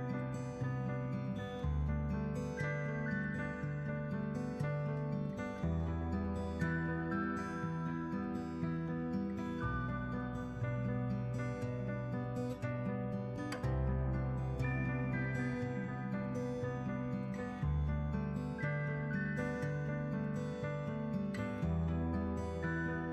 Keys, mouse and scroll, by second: 0.1-3.5 drag, 4.7 Tab, 5.5 shift+Left, 6.0 space, 10.3 space, 11.5 shift+Left, 14.8-16.1 drag, 16.9 space, 19.4 shift+Left, 21.0 click, 22.3 Tab, 22.7 a.